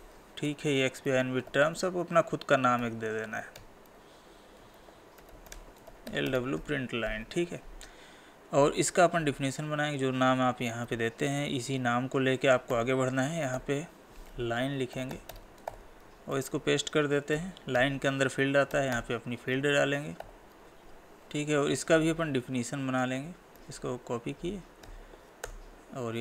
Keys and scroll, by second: 0.5 ctrl+v, 10.9 ctrl+c, 16.3 ctrl+v, 19.5 Tab, 23.6 ctrl+c.